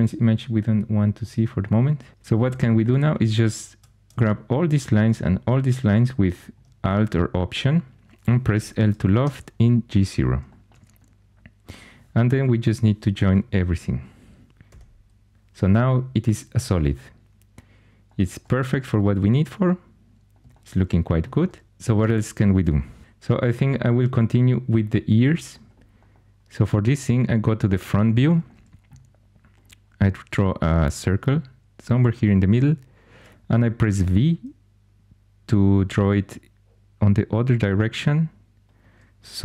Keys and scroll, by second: 2.1 2, 8.5 |, 9.0 Tab, 9.1 Tab, 12.5 4, 14.6 j, 33.9 v.